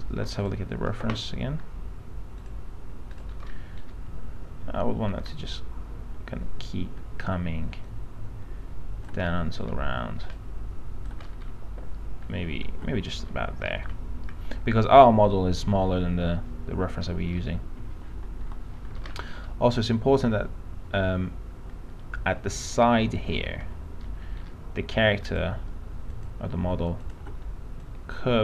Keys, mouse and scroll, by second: 0.7 click, 3.6 middle click, 3.9-4.8 scroll up 1, 5.5-7.3 shift+drag, 8.1-9.2 shift+drag, 9.5 middle click, 10.5 shift+click, 11.5 middle click, 12.4-12.7 scroll up 1, 13.8 middle click, 13.9-14.5 scroll down 1, 17.3 middle click, 17.4-18.6 scroll up 1, 18.6 p, 19.2-19.6 scroll down 1, 20.7-23.5 alt+middle drag, 23.5-24.3 scroll down 2, 24.3 middle click, 24.5-25.5 scroll up 1, 25.5 click, 26.3 ctrl+click, 27.2 ctrl+click, 28.0 click.